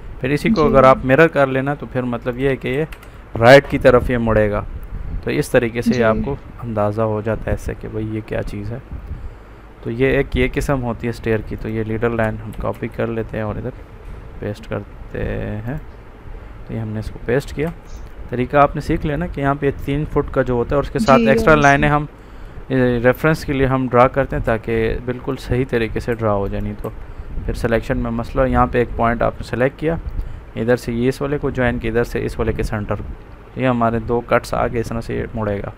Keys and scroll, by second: 12.5 ctrl+c, 12.7 ctrl+v.